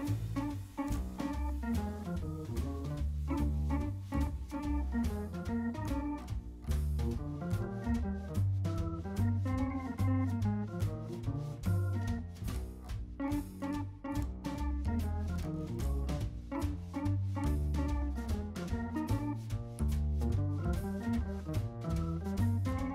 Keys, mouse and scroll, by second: 0.1 scroll down 1, 0.2 middle click, 0.8 scroll down 1, 1.8 middle click, 2.7-3.5 scroll up 1, 4.4-5.5 typing, 5.0 scroll up 1, 6.4 scroll up 1, 6.6 typing, 7.1 scroll down 1, 7.2 middle click, 7.8-8.7 typing, 9.4 scroll down 1, 9.5 middle click, 10.4 scroll down 1, 11.0 shift+middle click, 12.2-12.8 scroll up 1, 15.7 scroll down 1, 16.0 middle click, 16.7 g, 17.3 scroll up 1, 18.3-18.6 scroll down 1, 18.6 middle click, 19.5-19.9 scroll down 1, 19.9 shift+middle click, 21.3 middle click, 21.9 shift+middle click.